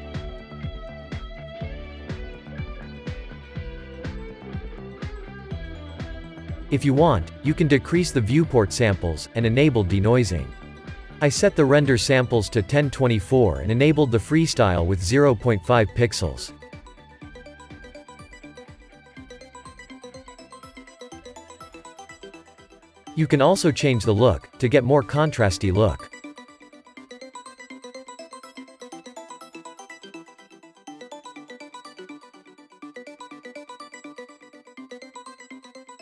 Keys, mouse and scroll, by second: 0.6-1.1 middle drag, 1.1-1.6 scroll up 1, 1.6-5.3 shift+middle drag, 5.3-5.9 scroll up 1, 5.9-11.4 drag, 11.7-31.4 drag, 31.4-34.4 shift+middle drag.